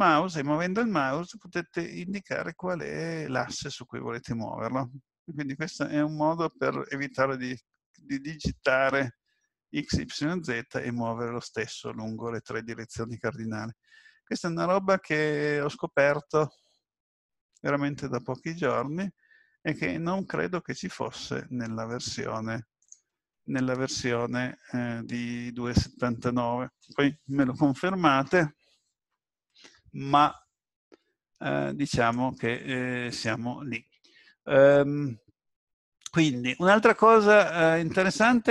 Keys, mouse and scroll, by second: 38.0 right click.